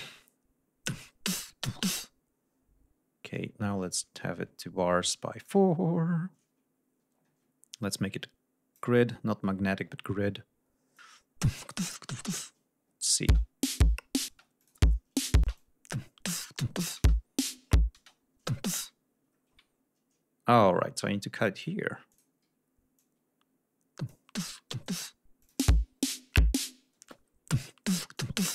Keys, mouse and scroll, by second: 0.7-3.4 drag, 3.7-5.6 drag, 5.7 scroll down 1, 7.0 ctrl+scroll up 2, 7.8 click, 9.2-9.7 scroll down 4, 10.9 click, 12.2 alt+d, 12.9 click, 13.2 space, 14.3 space, 14.5 click, 15.4 space, 15.5-16.5 drag, 16.7 click, 16.9 space, 17.9 space, 20.9 s, 21.5 click, 22.0 click, 22.9-24.2 drag, 24.3-25.0 drag, 25.3 click, 25.5 space, 26.9 space, 28.1 ctrl+click.